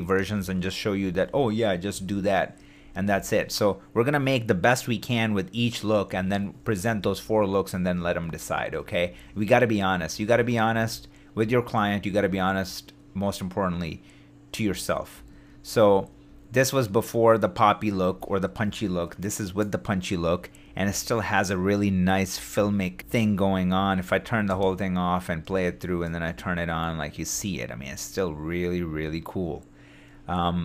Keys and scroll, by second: 0.0 shift+super+d, 0.9 shift+super+d, 1.7 shift+super+d, 2.8 shift+super+d, 6.1 super+d, 6.8 shift+super+d, 7.9 shift+super+d, 8.8 shift+super+d, 9.9 shift+super+d, 10.5 shift+super+d, 14.7 shift+d, 15.4 shift+super+d, 18.6 super+d, 20.6 super+d, 22.3 shift+d, 22.9 shift+f, 23.2 shift+super+d, 23.7 shift+d, 24.5 shift+space, 25.8 shift+d, 27.8 shift+d, 28.8 shift+f.